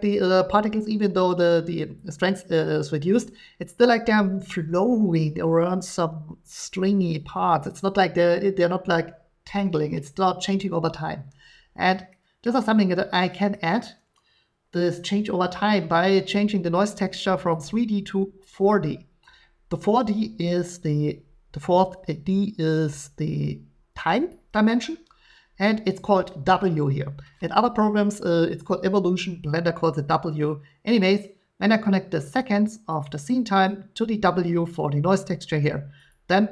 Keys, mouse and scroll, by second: 12.4 middle click, 13.5 middle click, 17.0 middle click, 17.6 click, 24.3-29.4 drag, 32.9 click, 34.6 click, 36.1 click.